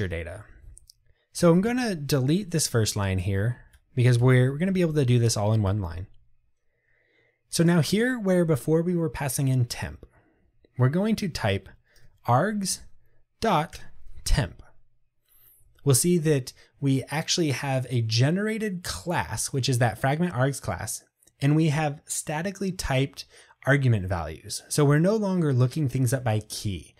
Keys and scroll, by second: 3.3 Delete, 13.8 Return.